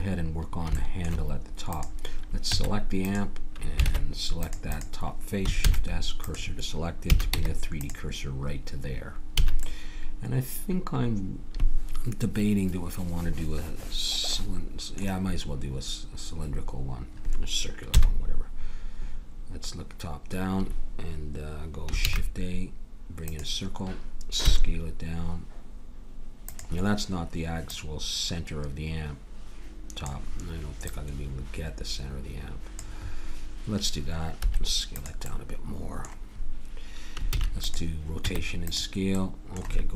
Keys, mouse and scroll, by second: 0.7 middle click, 1.7 click, 2.5 Tab, 3.8 ctrl+Tab, 5.6 shift+s, 7.1 a, 7.3 Tab, 9.4 a, 9.6-11.4 middle drag, 17.9 KP_7, 22.0 shift+a, 24.4 s, 27.7-29.6 drag, 30.8-32.7 drag, 34.4 s, 35.3-37.3 middle drag, 37.3 ctrl+a, 38.2 Tab.